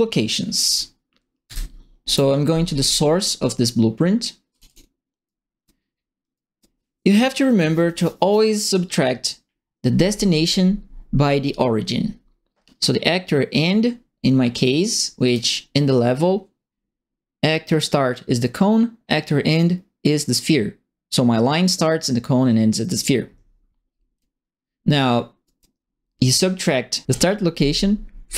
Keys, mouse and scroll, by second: 1.4 ctrl+e, 4.5 click, 4.6 click, 5.2 right click, 5.9 middle click, 6.3 right click, 15.2 click, 24.1 click, 25.4 right click, 27.1 click.